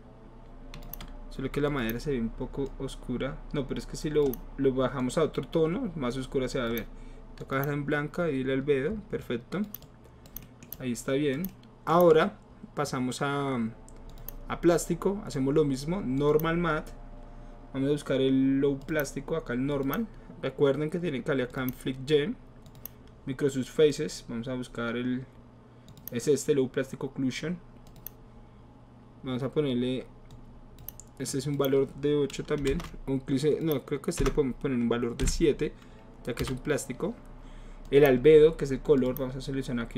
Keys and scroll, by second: 32.7 Return, 32.7 BackSpace, 34.2 BackSpace, 35.2 KP_7, 36.4 Return.